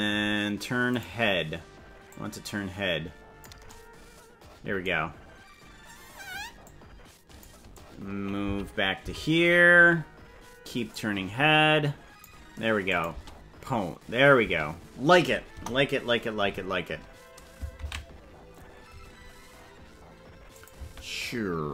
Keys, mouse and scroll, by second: 1.1 right click, 2.1-3.4 drag, 6.6 click, 8.5 Left, 9.1 Left, 10.8-12.2 drag, 12.8 click, 13.2 space, 14.4 space, 15.6 KP_0, 19.6 ctrl+s, 20.5 click, 20.8 space.